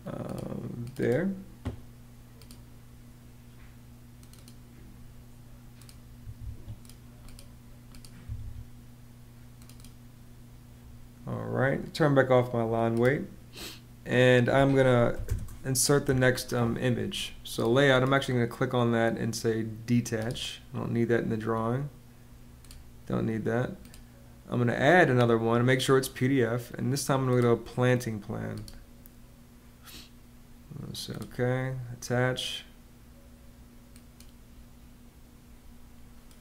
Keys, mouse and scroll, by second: 6.0 Escape, 8.0 Escape, 15.0 m, 15.1 Return.